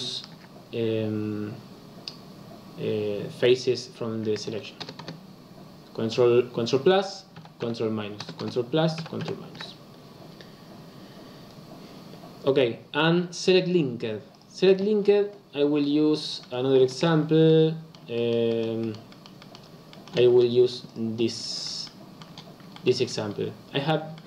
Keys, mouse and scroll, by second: 4.8 ctrl+KP_Add, 5.0 ctrl+KP_Add, 7.3 ctrl+KP_Subtract, 7.6 ctrl+KP_Subtract, 8.1 ctrl+KP_Add, 8.3 ctrl+KP_Add, 8.9 ctrl+KP_Subtract, 9.2 ctrl+KP_Subtract, 14.2 click, 14.9-15.8 scroll down 8, 15.8-17.1 middle drag, 17.1-17.4 scroll down 2, 17.4-20.2 middle drag, 20.2-20.6 scroll up 1, 20.6 Tab, 20.8 click, 21.3-21.8 scroll up 4, 21.8-23.1 shift+middle drag, 23.1-24.1 scroll down 1, 24.1-24.2 middle drag.